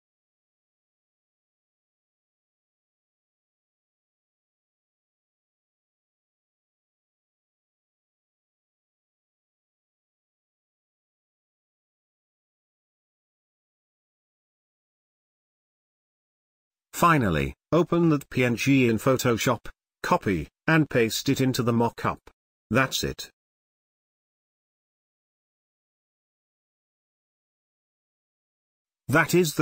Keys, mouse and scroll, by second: 5.2 click, 9.5 Return, 10.1 click, 10.6 right click, 12.0 click, 16.6 click, 22.5 click, 29.5 ctrl+v.